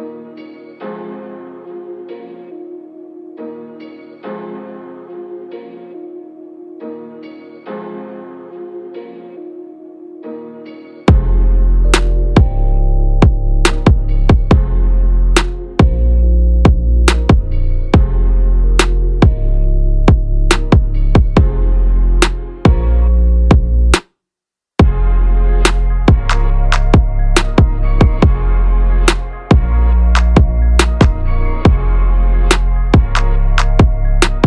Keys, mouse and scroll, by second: 1.7-3.3 drag, 5.3 click, 6.2 click, 7.5 click, 17.4 click, 18.0 click, 19.2 click, 20.2 click, 22.9 click, 25.4 click, 29.8 click.